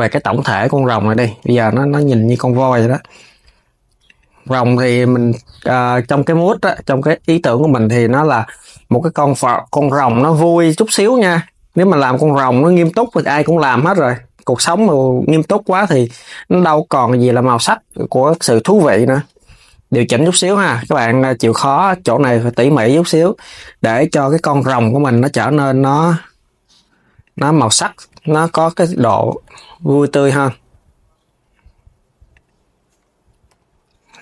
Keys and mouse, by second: 0.4 click, 0.6 KP_3, 1.2 g, 6.0 click, 6.5 KP_3, 7.1 g, 8.9 right click, 9.7 click, 11.1 click, 11.9 alt+shift+click, 12.5 KP_3, 13.0 g, 16.2 click, 16.9 alt+shift+click, 17.4 alt+shift+click, 17.9 KP_3, 18.5 g, 21.2 click, 21.6 KP_3, 22.2 g, 24.7 click, 25.0 KP_3, 25.5 g, 28.4 click, 28.6 KP_3, 29.1 g, 33.2 KP_3.